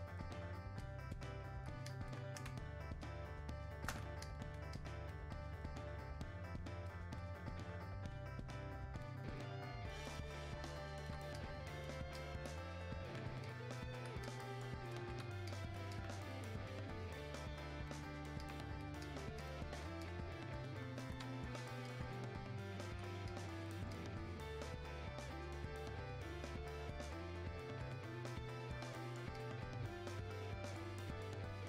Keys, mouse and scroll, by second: 2.5 space, 3.0 click, 3.0 space, 4.2-31.6 alt+drag.